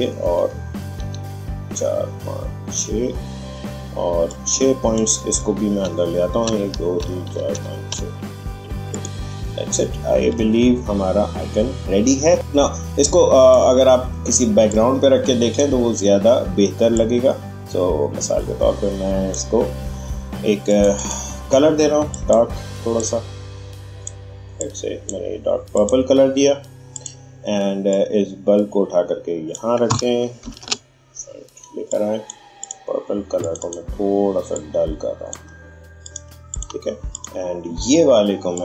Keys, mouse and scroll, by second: 4.2-6.4 drag, 6.4 Left, 8.9 click, 9.5-10.3 alt+scroll down 1, 12.3-30.4 drag, 30.4 ctrl+shift+], 31.9-38.6 drag.